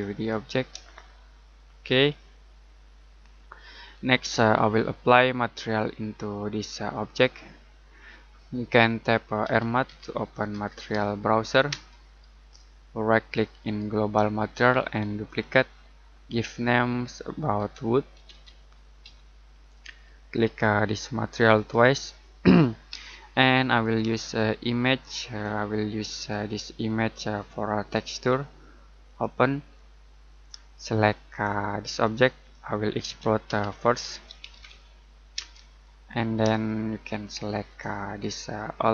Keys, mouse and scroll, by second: 0.9 middle click, 4.6 middle click, 7.3-7.7 scroll up 1, 7.7 scroll down 1, 7.9 middle click, 9.2-11.7 typing, 13.6 right click, 15.2 click, 17.5-19.0 typing, 19.6 click, 31.9 click, 33.0-35.3 typing, 36.6 shift+middle click, 37.9 middle click.